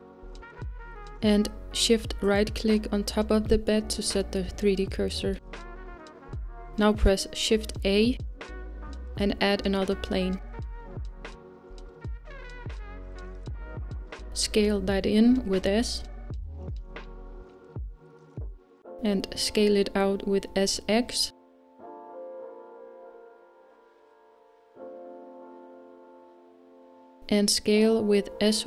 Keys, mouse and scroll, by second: 1.0-3.1 scroll up 2, 3.1 KP_7, 4.8 click, 5.3-5.8 scroll up 1, 6.0-9.3 shift+right drag, 9.3 shift+a, 13.5-19.5 s.